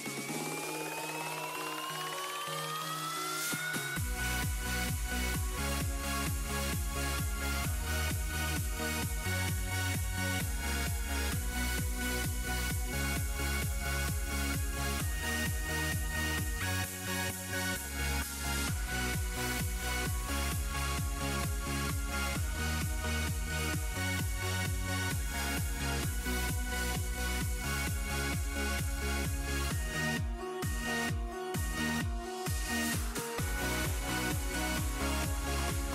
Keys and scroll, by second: 3.7 s, 4.2 s, 9.4 z, 30.5 ctrl+z.